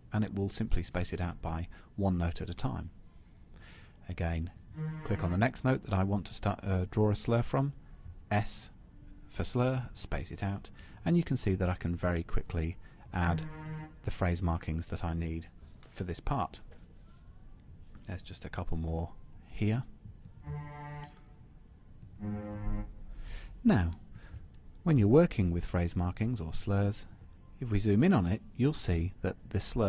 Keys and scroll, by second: 26.6 super+=, 27.9 super+-.